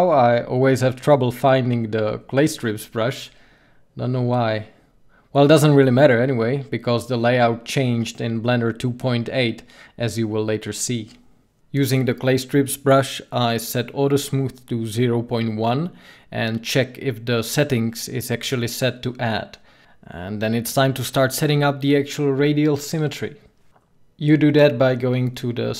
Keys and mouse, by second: 11.9-20.3 drag, 20.3-25.6 middle drag, 25.6-25.7 drag.